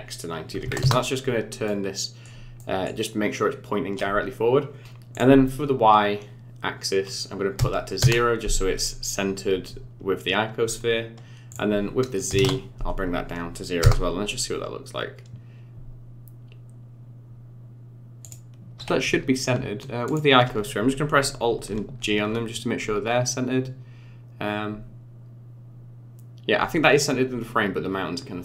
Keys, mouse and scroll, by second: 1.7 middle click, 2.6 middle click, 5.1 click, 11.5 click, 13.8 KP_0, 18.2 click, 20.1 shift+click, 21.7 alt+g.